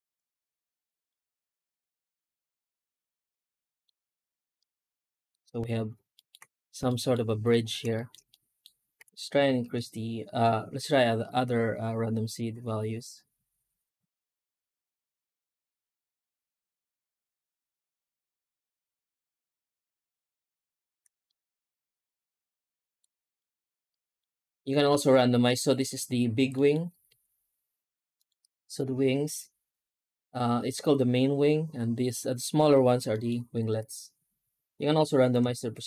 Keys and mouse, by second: 0.9-3.7 middle drag, 4.4-5.2 middle drag, 6.0 alt+middle click, 6.7 middle drag, 7.8 shift+middle drag, 8.2-8.5 middle drag, 8.8 F9, 21.1-22.8 middle drag, 23.2 shift+middle drag, 23.8 middle drag, 25.4 middle drag, 26.4 middle drag, 26.8 F9, 33.0 middle click.